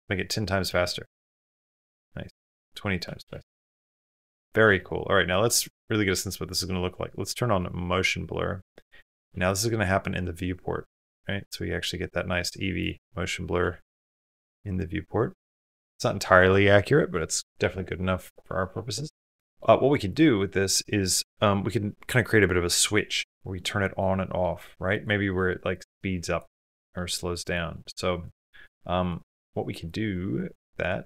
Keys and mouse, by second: 0.5 space, 2.2 click, 7.4 click, 10.9 space, 12.7-13.7 drag, 19.4-20.1 drag, 19.4 space, 23.9 click, 25.5 click, 27.3 click, 27.6-28.3 middle drag, 29.2 middle click, 29.3 click, 29.9 click, 30.3 click, 30.9 drag.